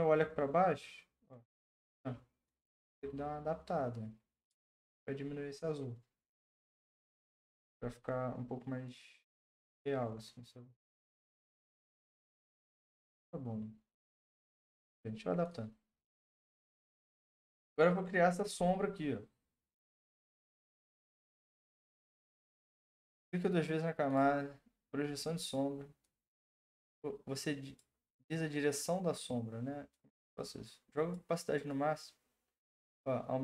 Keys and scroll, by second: 14.6 Return.